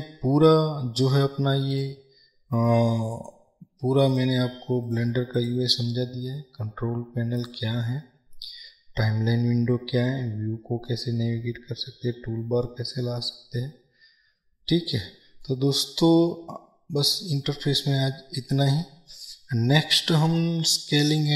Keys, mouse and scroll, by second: 6.1-21.3 middle drag.